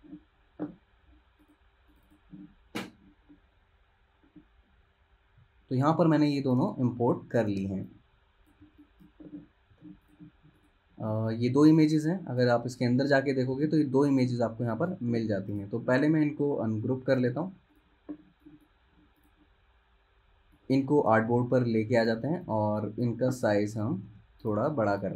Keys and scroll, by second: 8.7 z, 9.8 v, 13.7 super+z, 15.2 super+z, 23.9 super+z, 24.2 super+z.